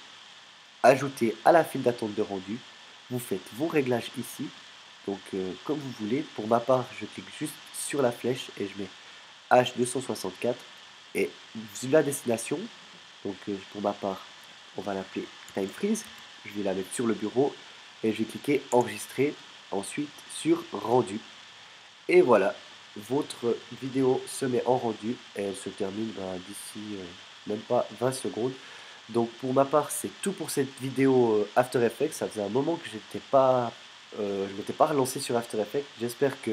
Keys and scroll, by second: 15.3-16.6 typing, 18.7 Return.